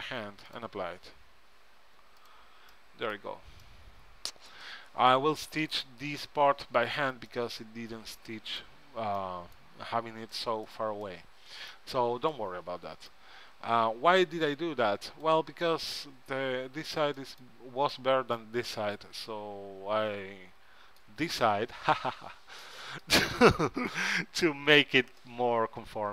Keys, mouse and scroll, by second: 0.6-2.8 drag, 1.1 Tab, 3.4 Tab, 9.6-14.2 middle drag, 14.5-16.1 drag, 15.8-20.4 middle drag, 15.8 right click, 22.7-25.8 middle drag, 25.9 middle click.